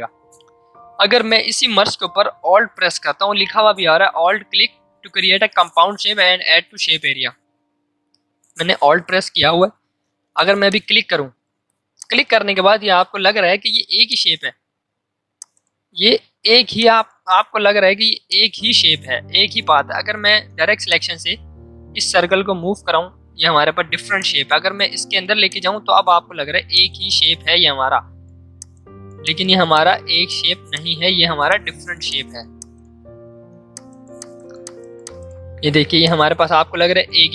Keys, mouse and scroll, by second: 2.2 ctrl+alt+z, 10.6 alt+click, 14.8 a, 15.3 click, 16.3 i, 16.8 click, 17.7 v, 18.2 click, 20.3 a, 20.8-37.3 drag.